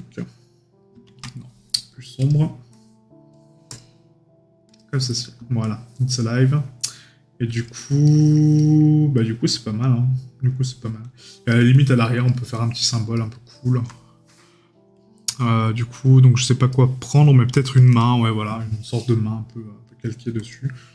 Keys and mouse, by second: 1.3 right click, 8.0 right click, 13.1 right click.